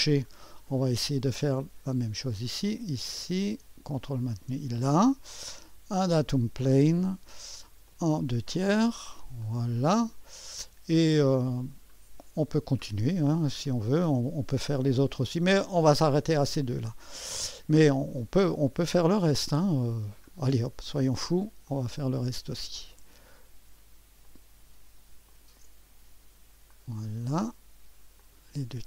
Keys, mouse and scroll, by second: 2.6 click, 4.2-5.3 drag, 6.0-7.2 drag, 7.9-9.0 drag, 9.4 click, 10.0 click, 10.3-11.3 scroll down 1, 10.7-12.4 drag, 12.0-12.9 scroll up 2, 12.9-13.7 scroll down 2, 13.5-15.2 drag, 15.2-15.9 scroll down 1, 15.9-18.4 drag, 15.9-16.3 scroll down 1, 18.7-20.8 drag, 20.2-21.4 scroll up 3, 21.0 click, 21.4 right click, 21.6-23.5 drag, 24.2-25.3 drag, 25.4-26.4 ctrl+drag, 26.7-27.7 drag, 28.2-28.8 drag.